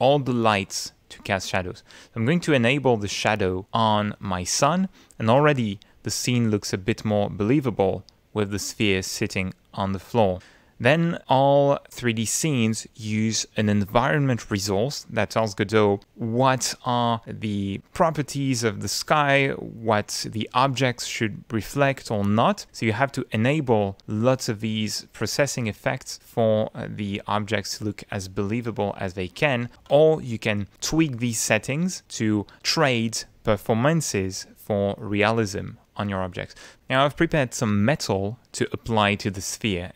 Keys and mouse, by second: 1.9 click, 11.0 click, 24.2 click, 26.2 click, 29.2 click, 38.7-39.9 drag.